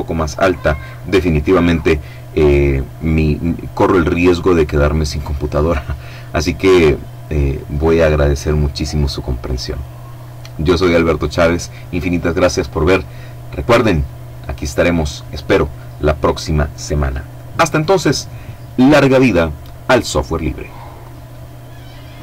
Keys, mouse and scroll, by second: 19.9 click, 20.9 click.